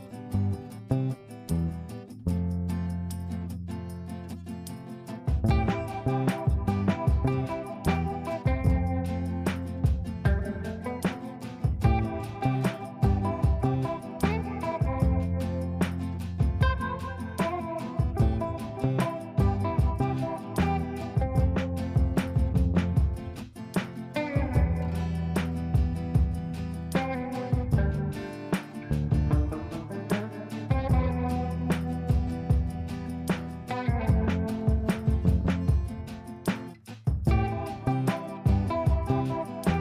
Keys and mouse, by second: 4.0 F3, 5.5-6.2 drag, 6.7 ctrl+g, 8.9-9.5 click, 9.9 F3, 11.0 shift+click, 12.0 l, 12.4 click, 15.2 shift+click, 16.0 Left, 18.2-22.0 drag, 22.0-23.2 drag, 25.9 click, 36.4 ctrl+space, 38.3-39.8 drag.